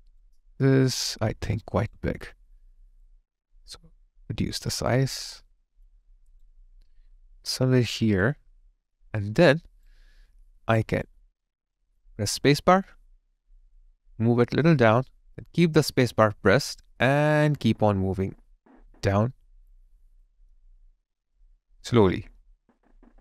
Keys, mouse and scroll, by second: 0.6 alt+click, 1.2 alt+middle click, 1.6 alt+right click, 4.9 alt+click, 6.0 alt+right click, 8.2 alt+click, 9.1 alt+right click.